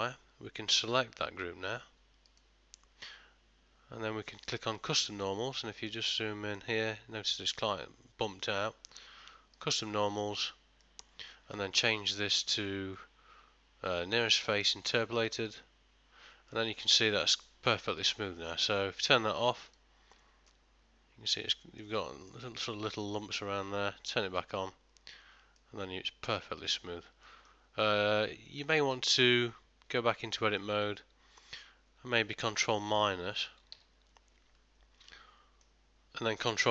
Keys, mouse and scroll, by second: 5.9 ctrl+middle click, 9.9 click, 10.9 middle click, 12.4 click, 16.5 middle click, 19.8 click, 20.5 middle click, 22.2 ctrl+middle click, 24.7 click, 25.6 middle click, 28.8 ctrl+middle click, 30.0 Tab, 30.6 middle click, 33.8 ctrl+KP_Subtract, 35.1 middle click.